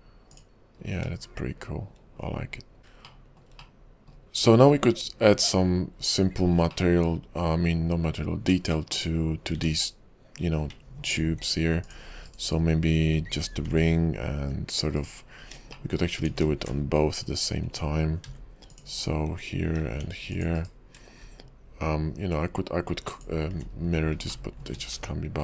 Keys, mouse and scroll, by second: 0.4 click, 1.0 scroll up 3, 2.4-2.8 scroll down 4, 2.8 middle click, 2.8-3.1 scroll up 4, 2.8 KP_5, 3.2 shift+middle click, 3.8 middle click, 4.5-5.5 scroll up 2, 5.5 click, 6.1 /, 6.9 middle click, 8.9 shift+middle click, 9.2-9.6 scroll up 2, 9.6 Tab, 11.2 ctrl+r, 12.8-13.2 scroll up 3, 13.7 ctrl+b, 15.4-15.9 scroll down 6, 15.9 shift+middle click, 16.4 ctrl+z, 18.3 ctrl+r, 19.8 ctrl+r, 23.1 alt+shift+click, 23.9-24.5 scroll up 6, 24.5 shift+middle click.